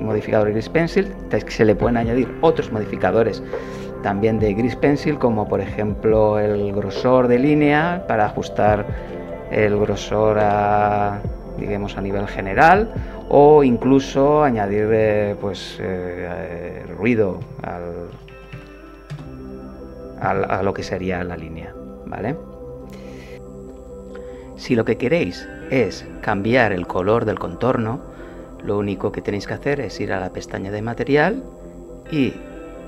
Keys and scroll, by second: 9.0 KP_0, 9.9 KP_8, 10.4 Return, 18.2-18.6 typing, 19.1 Return.